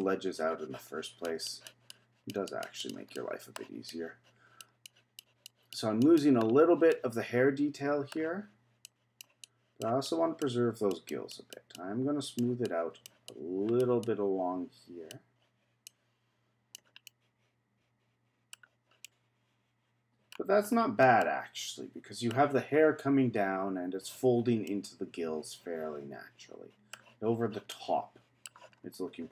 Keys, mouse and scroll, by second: 0.0-3.1 drag, 3.1 middle click, 3.9-6.4 drag, 6.4-6.9 scroll down 2, 6.9-8.8 middle drag, 8.8-17.0 drag, 17.0-18.6 middle drag, 18.6-19.0 scroll down 1, 19.0-20.3 middle drag, 20.3-21.2 scroll down 4, 21.2-22.3 middle drag, 22.3-24.6 scroll down 1, 24.6-27.7 middle drag, 27.7-28.8 middle drag, 28.8-29.3 scroll up 8.